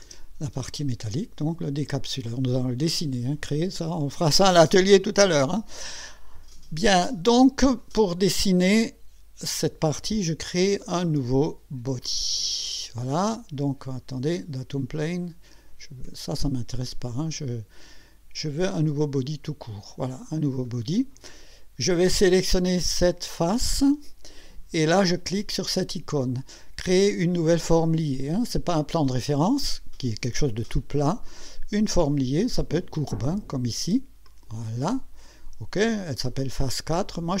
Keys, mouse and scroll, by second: 0.0 space, 0.6 click, 2.5-4.5 drag, 12.0 click, 14.4 click, 16.0 Escape, 17.1 click, 19.1 click, 23.2 click, 34.3 click, 36.9 click.